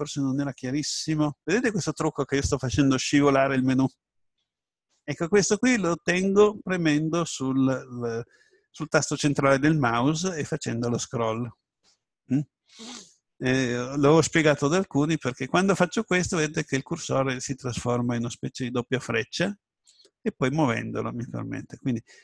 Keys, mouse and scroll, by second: 16.2-18.0 middle drag.